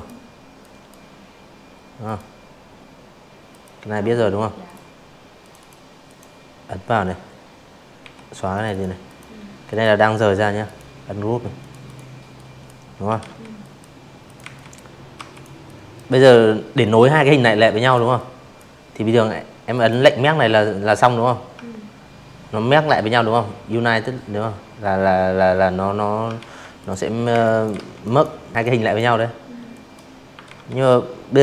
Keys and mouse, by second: 0.5 click, 1.6 click, 2.4 click, 2.6 click, 3.0 click, 5.0 Delete, 5.5 click, 6.0 click, 6.6 click, 7.6 right click, 8.6 click, 8.8 click, 9.3 drag, 10.2 ctrl+z, 10.6 drag, 11.2 click, 11.4 z, 11.5 click, 12.1 v, 12.3 click, 12.6 drag, 14.8 click, 15.1-15.5 drag, 16.7 click, 23.3 ctrl+z, 23.7 click, 24.3 space, 24.4 click, 24.7 z, 25.0 click, 26.2 click, 26.7 v, 26.8 click, 27.1 click, 28.0 click, 28.5 click, 29.0 click, 29.5 click, 30.7 click, 31.3-31.4 shift+drag.